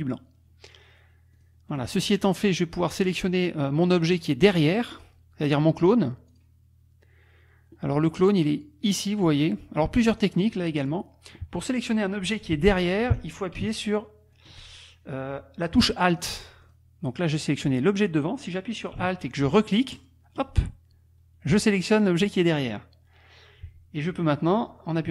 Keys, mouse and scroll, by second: 0.1 click, 1.4 click, 1.7 click, 2.5 click, 4.9 click, 6.3 click, 8.5-9.8 drag, 10.2 click, 10.8 click, 13.8 alt+click, 14.3 alt+click, 16.1 click, 16.6 click, 19.9 alt+click.